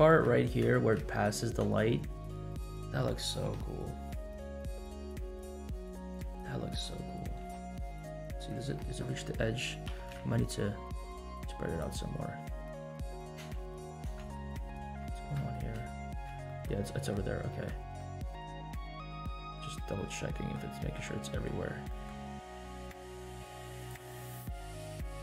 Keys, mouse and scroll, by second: 0.4 scroll up 1, 0.7 shift+middle click, 1.6 space, 4.1-4.6 scroll down 3, 5.3 scroll up 1, 5.4 space, 5.8 scroll up 1, 6.4 scroll down 2, 6.8 space, 7.4 space, 7.8 scroll up 2, 8.1 shift+middle click, 8.6 scroll up 1, 9.9 s, 12.2-12.7 scroll down 2, 13.3 space, 14.0 space, 14.3 scroll up 2, 14.7 shift+middle drag, 15.2 scroll up 1, 15.5 shift+middle click, 16.1 scroll down 1, 16.4 shift+middle click, 16.9-17.4 shift+middle drag, 17.4 shift+middle click, 18.0 shift+middle click, 18.9 shift+middle click, 19.4 shift+middle click, 19.9 shift+middle click, 20.8 shift+middle click, 21.3 shift+middle click, 21.9 shift+middle click, 23.8 drag, 24.1-24.8 scroll down 4, 24.7 s.